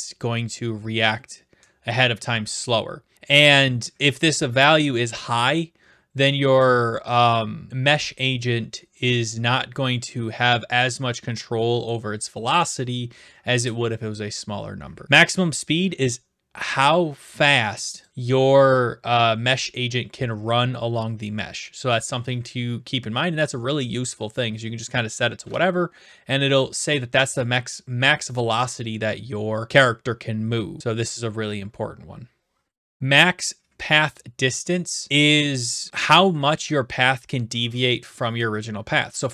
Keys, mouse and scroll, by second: 18.0 click, 34.1 click.